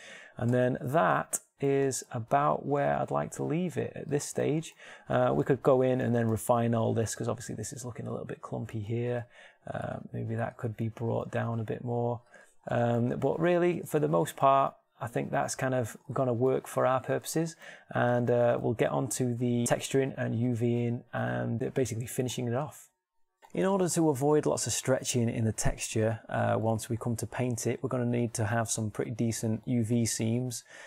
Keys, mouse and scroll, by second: 0.5 Tab, 1.4 z, 3.1 g, 7.5 Tab, 8.3 Tab, 9.3 Tab, 11.4 g, 12.7 Tab.